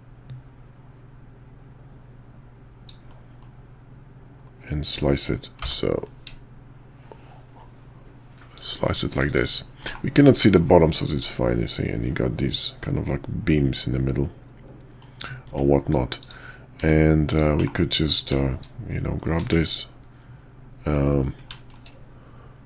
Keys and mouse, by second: 9.3 click, 9.8 /, 10.7-12.8 middle drag, 12.8 click, 13.8 middle drag, 14.0 click, 14.2 middle click, 14.5-15.0 drag, 15.5 Tab, 16.2 click, 16.8 Tab, 17.3 click, 17.6 /, 18.4 shift+click, 19.2 q, 21.5 shift+drag.